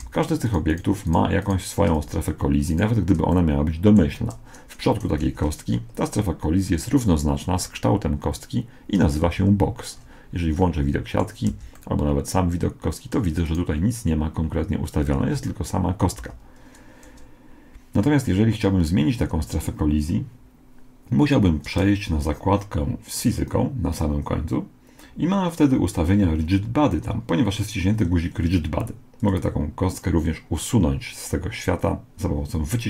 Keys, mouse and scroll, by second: 1.9 x, 3.3-5.3 middle drag, 5.3 alt+r, 9.2 z, 9.9-13.4 middle drag, 11.5 z, 13.4 right click, 15.2 z, 16.2 z, 23.2-25.0 drag, 29.2-31.0 drag.